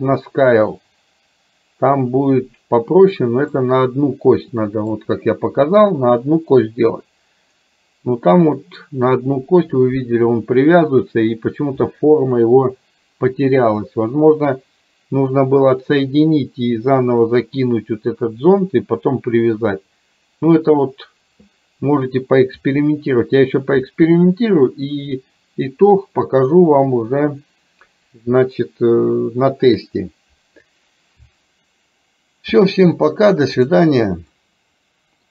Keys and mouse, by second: 3.6-5.0 middle drag, 34.4-35.3 middle drag.